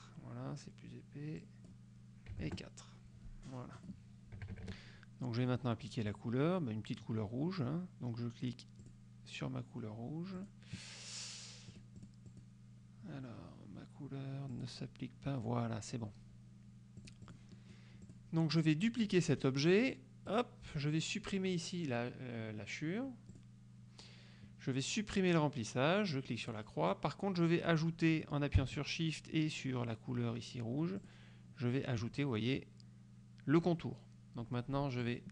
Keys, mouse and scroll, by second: 1.5 click, 2.4 KP_4, 2.6 KP_Enter, 3.8 click, 4.4 KP_Subtract, 5.4 click, 9.0 click, 10.5 click, 11.8 click, 14.6 click, 17.1-18.0 drag, 18.2 click, 18.6 click, 20.4 click, 23.4 click, 26.5 click, 31.1 shift+click, 35.1 click.